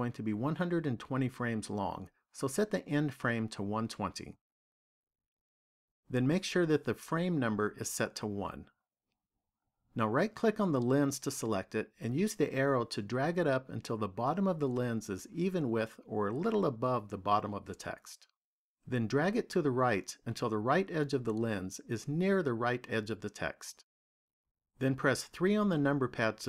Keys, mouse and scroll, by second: 3.0 click, 10.8 right click, 12.4 click, 19.5 click, 25.3 KP_3.